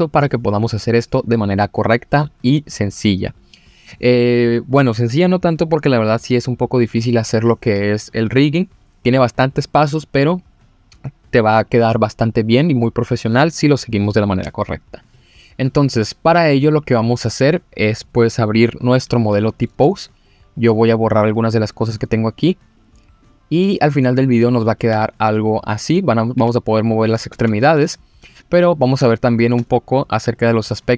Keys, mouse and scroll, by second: 19.2-19.6 middle drag, 19.9-20.7 scroll down 1, 21.4 click, 22.0 click, 22.4 click, 22.7 click, 23.2 click, 23.8-24.3 scroll up 2, 24.3 click, 24.6 middle drag, 24.9 g, 25.6 click, 26.3 click, 26.4 g, 26.9 click, 27.3 ctrl+z, 28.4 click, 29.1-29.5 shift+middle drag, 29.6 middle click.